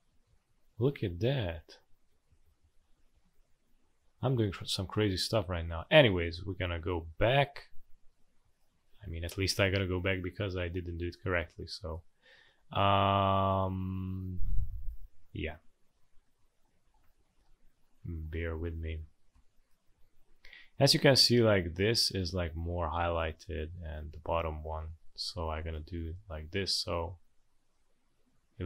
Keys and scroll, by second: 0.1 ctrl+d, 0.3 ctrl+d, 0.5 ctrl+d, 0.7 ctrl+d, 0.9 ctrl+d, 1.1 ctrl+d, 1.3 ctrl+d, 1.5 ctrl+d, 2.1 ctrl+z, 2.3 ctrl+z, 2.4 ctrl+z, 2.6 ctrl+z, 2.8 ctrl+z, 2.9 ctrl+z, 3.1 ctrl+z, 3.3 ctrl+z, 3.6 ctrl+z, 3.8 ctrl+z, 4.1 ctrl+z, 4.3 ctrl+z, 7.2 Delete, 8.6 Delete, 15.9 ctrl+d, 16.8 ctrl+d, 17.0 ctrl+d, 17.2 ctrl+d, 17.3 ctrl+d, 18.1 ctrl+d, 19.3 v, 28.5 space.